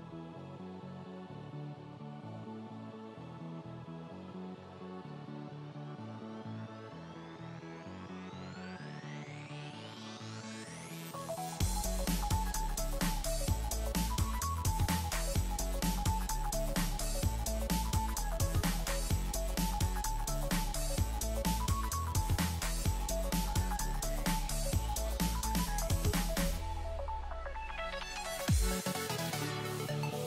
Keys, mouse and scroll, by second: 1.8 click, 2.7 BackSpace, 4.2-6.5 drag, 9.9-10.6 scroll down 1, 10.5-11.3 typing, 10.6 click, 11.3 click, 11.8 click, 12.1 scroll down 1, 12.2-14.1 drag, 16.0 shift+click, 16.5 click, 17.0 typing, 17.4 click, 20.3 BackSpace, 20.7 click, 25.1-26.3 drag, 27.3-28.3 drag.